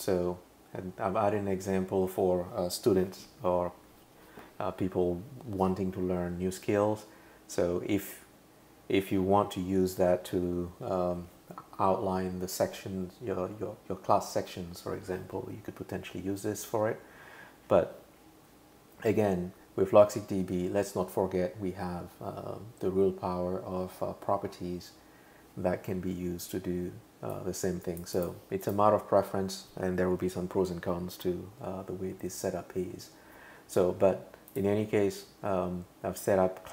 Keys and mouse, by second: 27.3 click, 28.2 click, 28.6 click, 34.5 click.